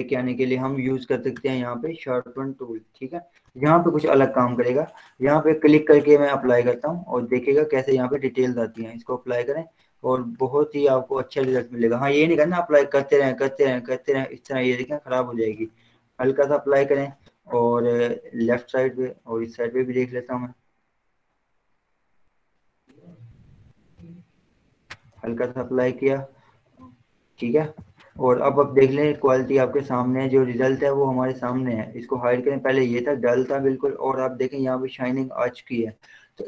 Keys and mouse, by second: 1.8 right click, 2.6 click, 3.8 ], 7.1-15.6 drag, 15.6 ctrl+z, 16.9 ctrl+0, 17.7 z, 18.9 click, 19.6 b, 21.1-25.5 drag, 25.5 ctrl+0, 26.2 z, 26.9 click, 27.9 ctrl+0, 29.1 click, 30.0 z, 30.9 click.